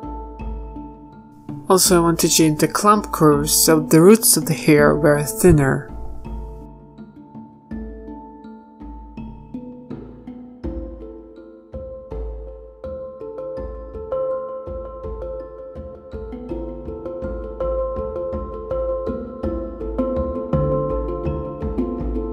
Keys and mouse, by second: 0.6 z, 1.4 z, 9.6-10.8 drag, 9.8 z, 10.8 z, 11.4 z, 14.0 z, 16.0-17.9 middle drag, 20.5 z, 20.9 KP_1, 21.4 z, 22.1 ctrl+z.